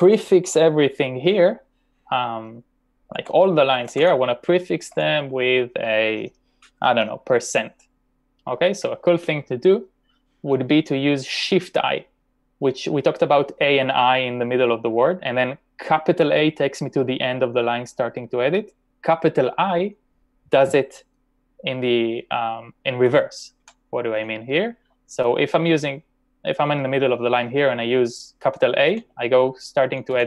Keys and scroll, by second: 3.2 ctrl+\, 3.5-4.4 typing, 23.3-25.6 typing, 28.9-30.2 typing.